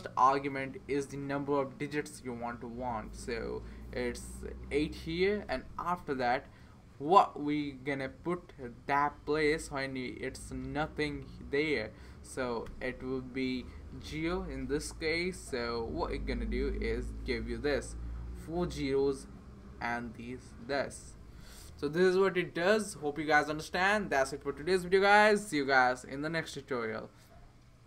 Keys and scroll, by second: 4.3-5.5 typing, 12.7 ', 14.3 o.